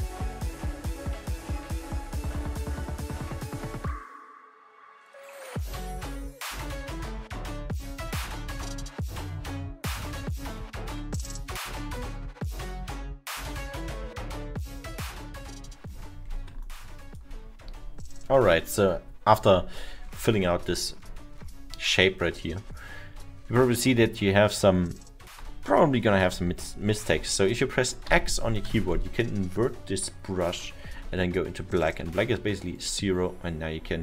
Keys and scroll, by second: 7.3 x, 26.5 x, 28.1 x, 30.5 x.